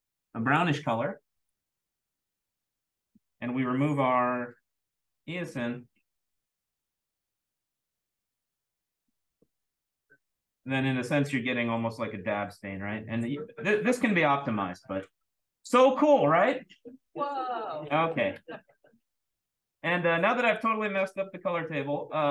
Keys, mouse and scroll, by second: 0.3 click, 1.4 click, 4.9-5.4 drag, 8.8 click, 10.0-11.9 scroll up 2, 20.3 click, 21.1 click, 21.7 click.